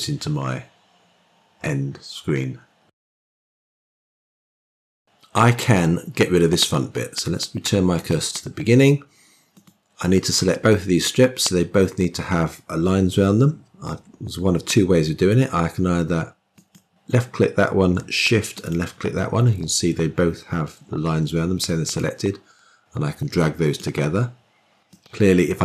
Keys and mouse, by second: 7.8 click, 9.4 click, 16.4 click, 18.4 shift+click, 21.8-23.7 drag, 24.7-25.6 drag.